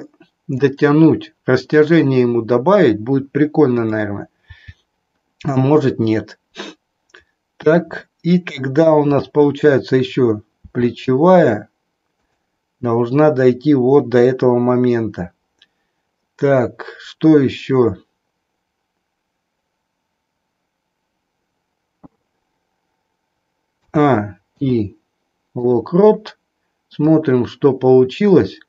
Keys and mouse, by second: 4.6 g, 10.6 r, 23.7 a, 24.5 i, 27.1-28.6 drag.